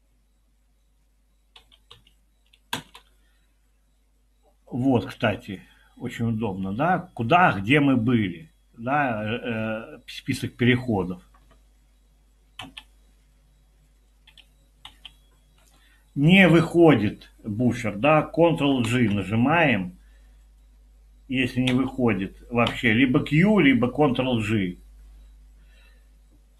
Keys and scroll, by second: 1.6-1.9 typing, 2.7 Return, 12.7 Escape, 14.3 Escape, 14.8 Escape, 18.9 ctrl+g, 21.7 Escape, 22.7 q.